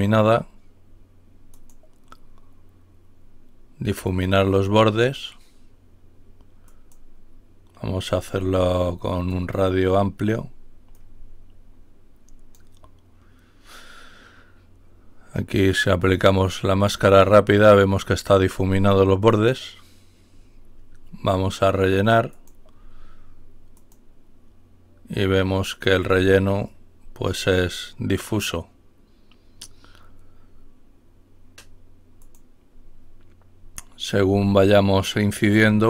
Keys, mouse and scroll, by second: 1.5 click, 4.1 click, 6.7 click, 8.0 click, 9.3 click, 10.9-13.1 drag, 13.1-14.2 scroll down 1, 16.9 click, 19.3 click, 22.2 click, 23.7 click, 32.1 click, 35.6 click.